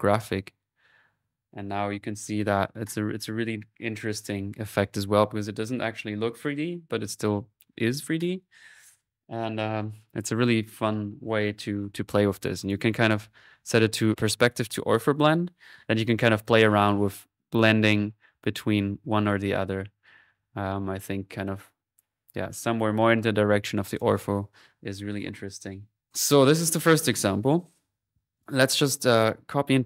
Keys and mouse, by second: 12.6 click, 15.8-23.1 drag, 16.6 typing, 23.6-24.9 drag, 26.1 click, 27.8 middle click, 28.6 click.